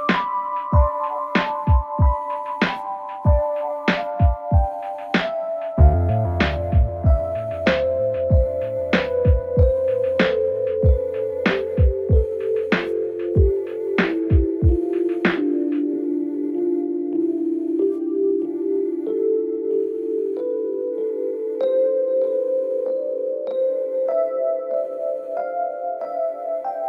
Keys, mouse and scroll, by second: 0.1 click, 0.5 g, 1.6-2.1 scroll down 3, 2.1 click, 2.6 scroll up 2, 2.9 scroll down 2, 3.1 click, 3.4 click, 3.8 2, 4.6 Tab, 4.7 click, 5.7 i, 7.1 click, 7.7 click, 8.2 shift+click, 8.5 shift+click, 8.7 shift+click, 9.6 ctrl+b, 10.9-11.9 drag, 12.5 Tab, 12.8 click, 13.4 click, 14.3 click, 14.6 g, 15.2 click, 15.6 g, 17.7 click, 18.1 scroll up 2, 18.4 click, 18.6 click, 18.9 click, 19.5 click, 20.0 g, 21.7 click, 22.0 click, 22.8 click, 23.4 click, 23.7 scroll up 1, 23.8-24.7 scroll down 5, 24.7 click, 25.1-25.8 scroll down 2, 25.8 g.